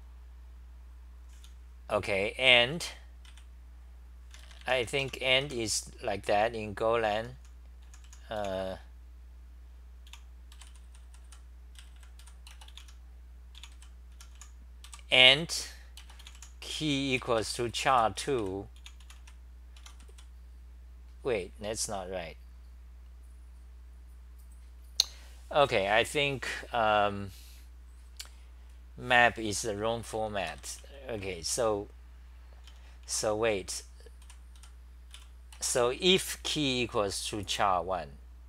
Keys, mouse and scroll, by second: 1.4 t, 3.3 l, 5.0 Home, 6.9-9.0 typing, 10.1-20.1 typing, 19.8 Home, 30.5 ctrl+g, 32.4-35.1 typing.